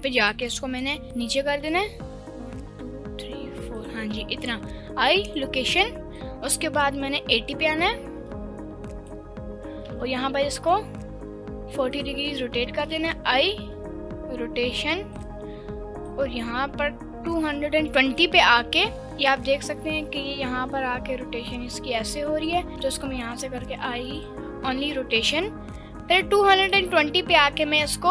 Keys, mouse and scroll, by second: 0.3 click, 1.0 click, 1.6 g, 3.8 ctrl+click, 4.7 i, 6.2-9.1 drag, 9.9 r, 12.0 ctrl+click, 13.2 i, 16.0-18.3 drag, 19.0-22.5 drag, 22.7 ctrl+z, 23.0 ctrl+z, 23.6 i, 25.2-25.9 drag, 26.7 right click, 27.6 r.